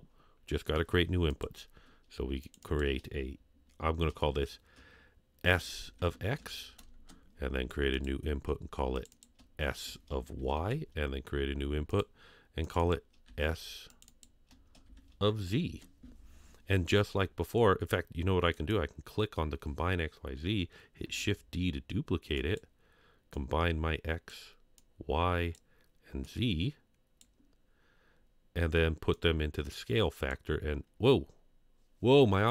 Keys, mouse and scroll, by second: 1.3 click, 2.6-7.3 drag, 7.9 click, 8.3 scroll down 1, 9.1-10.9 drag, 11.9 drag, 12.8 click, 13.2 s, 14.1-15.8 drag, 18.5 click, 21.0 shift+d, 23.3-25.5 drag, 26.2-27.2 drag, 29.1-30.5 drag.